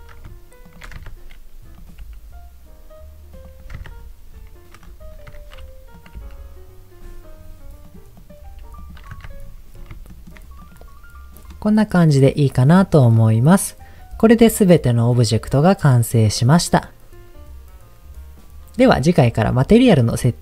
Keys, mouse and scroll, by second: 0.6 shift+click, 1.0 Tab, 1.7 click, 2.0 g, 2.6-3.0 scroll down 3, 3.3 click, 3.8 Tab, 3.9-4.3 scroll down 2, 4.8 scroll down 2, 5.3 Tab, 5.9 click, 6.2 g, 6.9 scroll down 1, 7.0-7.8 scroll up 6, 7.8 click, 8.1 click, 8.5 g, 8.8 click, 9.1 Tab, 9.4-9.9 scroll down 4, 10.1 shift+middle click, 10.6 click, 11.5-13.2 middle drag.